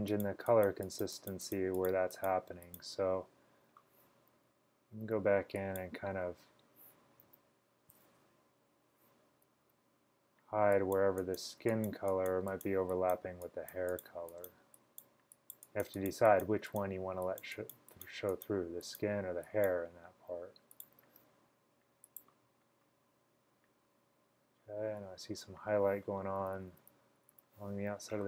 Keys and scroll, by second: 4.4-5.0 typing, 6.2 [, 7.3 super+z, 9.6 typing, 26.5-27.4 typing.